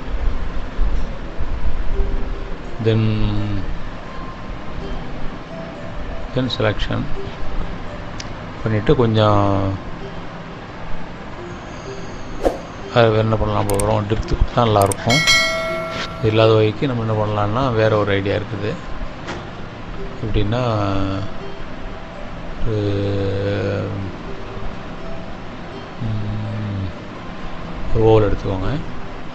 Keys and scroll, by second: 1.1 Down, 11.8 Up, 12.1 Right.